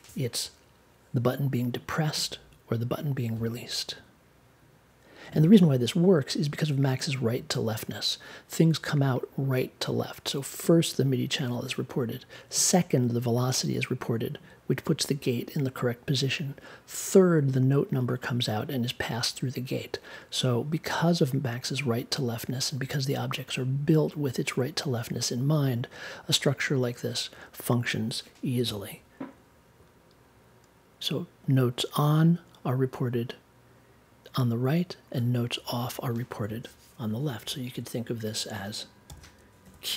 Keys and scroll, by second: 39.0 c.